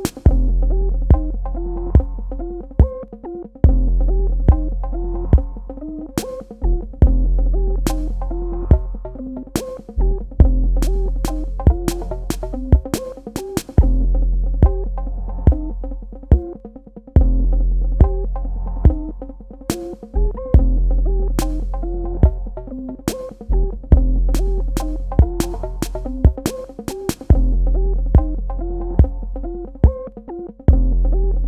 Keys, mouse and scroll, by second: 3.7 Escape, 5.5 click, 23.8 space, 24.2 click, 24.4 space, 25.4 click, 26.7 space, 27.4 click, 27.5 space, 29.4 click.